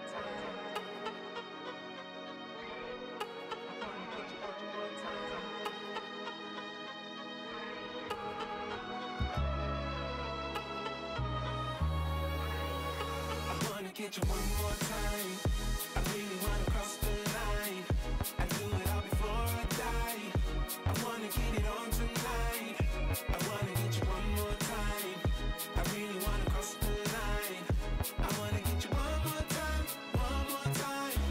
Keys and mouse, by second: 0.4 x, 0.5 click, 0.7 click, 1.0 click, 1.1 click, 1.2 click, 2.3 click, 2.6 click, 3.0 click, 3.1 click, 3.3 click, 4.5 click, 4.6 click, 5.0 click, 5.3 click, 5.4 click, 5.6 click, 7.3 ctrl+z, 8.1 click, 11.7 click, 12.7 space, 13.2 space, 13.8 click, 14.1 click, 14.3 click, 14.4 x, 15.3 click, 17.3 click, 19.6 click, 20.5 click, 21.3 click, 22.5 click, 24.0 click, 24.2 click, 24.4 click, 24.6 click, 25.1 click, 25.2 click, 25.8 click, 26.2 click, 26.6 click, 27.7 click, 27.9 click, 28.1 space, 28.4 click, 29.5 click, 29.8 KP_2, 29.9 Return, 30.3 click, 30.8 KP_2.